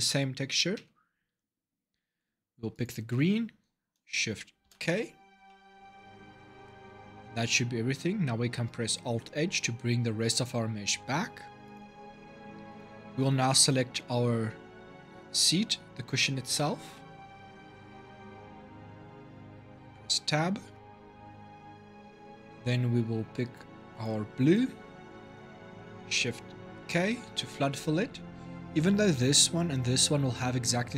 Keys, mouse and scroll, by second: 0.5 Tab, 2.5 click, 4.4 shift+k, 5.2-6.9 middle drag, 6.9 Tab, 8.9 alt+h, 10.1 click, 11.4 click, 12.5 click, 16.3 l, 19.3 Tab, 23.7 click, 26.6 shift+k.